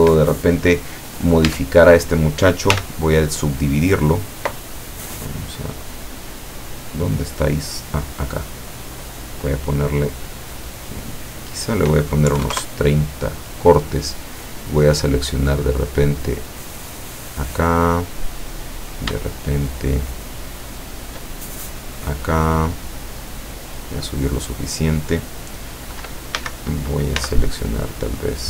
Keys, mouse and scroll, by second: 0.0 Escape, 1.1 right click, 1.5 Tab, 2.7 w, 3.4 click, 5.7 click, 6.8-7.9 drag, 8.5-10.4 drag, 11.2 click, 12.4 KP_3, 12.6 KP_Enter, 14.5 right click, 15.2-17.1 drag, 18.9 shift+right click, 19.3 shift+right click, 19.7 shift+right click, 20.3 shift+right click, 20.8 shift+right click, 21.5-24.5 shift+drag, 26.4 a, 27.2 c, 28.0-28.4 drag.